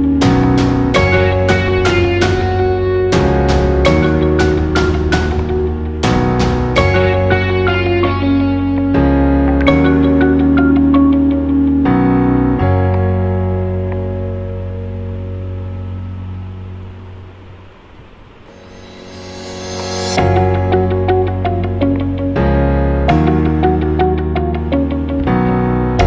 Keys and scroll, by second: 25.4 super+æ.